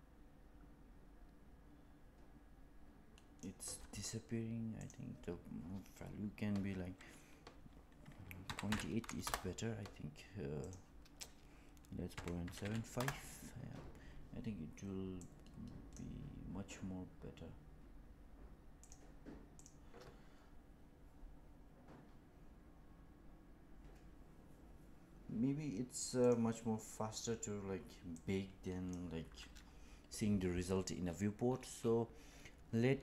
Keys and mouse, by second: 4.7-10.2 drag, 10.5-14.0 drag, 16.1 click, 18.8 click, 29.0 click.